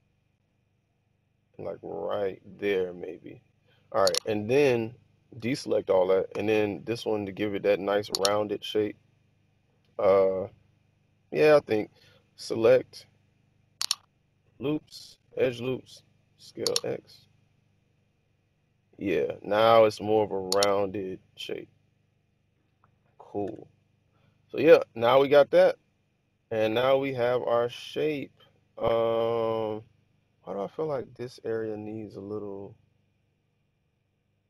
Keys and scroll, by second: 6.2 b, 14.1 typing, 16.3-16.6 typing, 23.4 Tab.